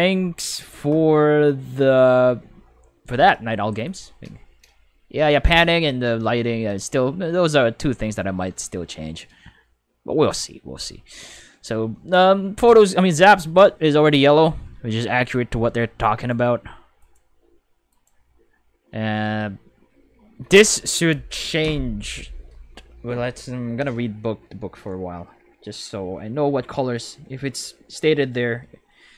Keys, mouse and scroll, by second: 3.8 click, 14.4 5, 16.1 right click, 17.0 right click, 17.9 right click.